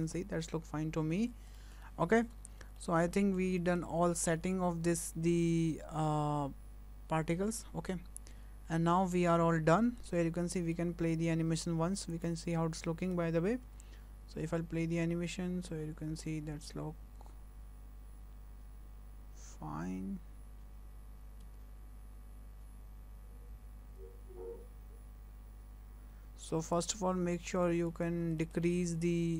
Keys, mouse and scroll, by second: 0.2 scroll down 2, 0.4 middle click, 1.6 middle click, 1.8 shift+middle click, 2.5 scroll down 1, 2.8 shift+middle click, 3.2 middle click, 3.6 shift+middle click, 4.3-5.8 scroll up 9, 7.7-9.4 scroll down 9, 9.4-10.1 scroll up 10, 10.1 scroll down 3, 10.6 shift+middle click, 11.0 scroll up 1, 11.6-12.1 scroll up 1, 12.1 click, 13.1 scroll up 2, 13.7 space, 21.0 space, 21.4 space, 26.4 space, 26.7 click, 27.3 scroll up 3, 27.6 shift+middle click, 28.0 scroll up 2, 28.4 shift+middle click.